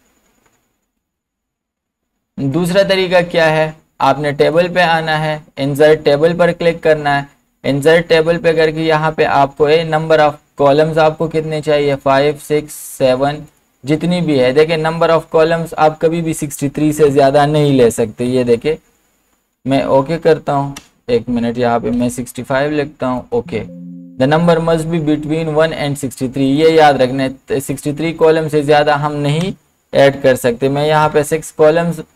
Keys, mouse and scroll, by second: 0.8 ctrl+z, 2.5 click, 11.9 click, 12.0 click, 17.1 click, 17.1 BackSpace, 20.8 BackSpace, 23.2 BackSpace, 23.2 click, 26.5 click, 29.4 BackSpace.